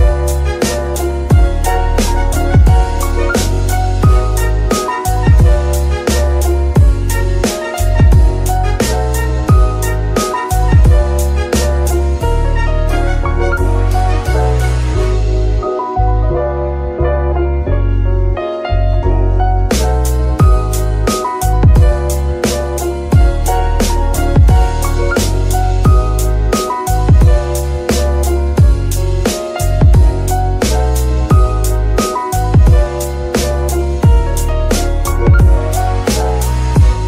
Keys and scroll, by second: 0.1 g, 0.2 z, 2.2 z, 35.7 ctrl+Tab.